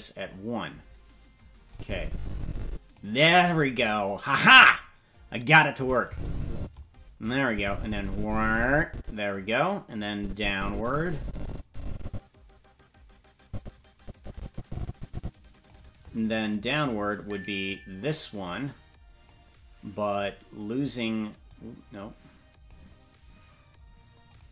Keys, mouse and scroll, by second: 1.7-3.0 drag, 5.8 click, 6.0 space, 6.5 space, 7.4-15.7 drag, 17.6-19.3 drag, 21.4-22.7 drag, 24.2 click.